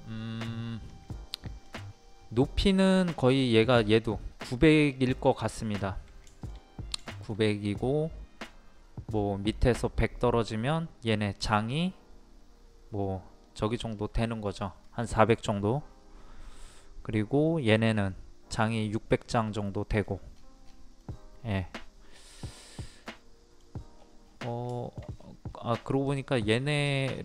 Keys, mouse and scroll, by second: 1.3 middle click, 1.9-2.2 scroll up 1, 6.2 middle click, 20.3-20.6 scroll down 1, 21.0 middle click, 22.1-22.4 scroll down 1, 22.8 middle click, 23.9-24.2 scroll up 2, 24.7 shift+middle click, 25.2-25.5 scroll up 1, 26.0 click, 26.5 scroll down 1.